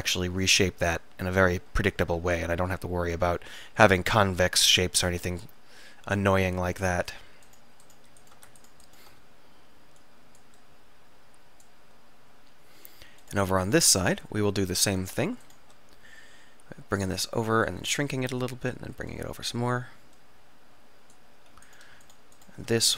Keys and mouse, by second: 2.4 click, 2.6 click, 2.8 click, 7.5 click, 9.4-10.7 middle drag, 10.1 click, 10.1 right click, 12.2 click, 12.3 click, 13.0-17.7 middle drag, 18.0 s, 21.7-22.9 drag.